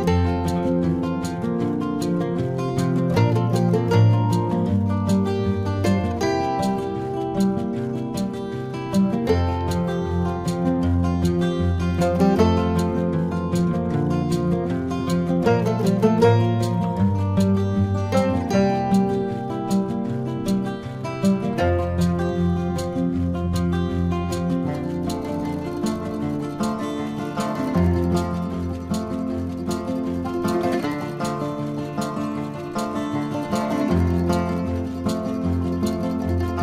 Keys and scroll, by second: 5.6 ], 27.1 ].